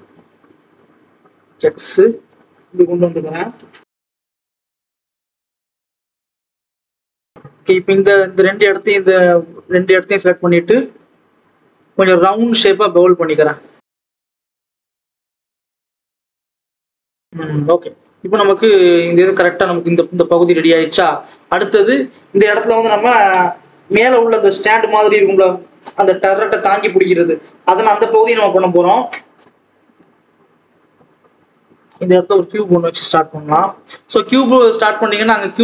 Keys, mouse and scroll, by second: 5.2 scroll down 1, 5.4-6.0 scroll up 1, 6.0 click, 6.9 alt+a, 8.4-9.7 drag, 10.3 shift+click, 11.7 shift+click, 12.4 ctrl+z, 12.8 shift+click, 14.0 shift+click, 15.2 ctrl+b, 17.1 alt+a, 17.2 Tab, 17.3 scroll down 2, 17.4 alt+a, 18.8 click, 29.4 Tab, 29.5 alt+a, 31.0 shift+a, 31.3 scroll up 1, 31.5-32.1 scroll down 2, 32.1 KP_1, 32.7-33.1 scroll up 2, 33.5 g, 34.2 Tab.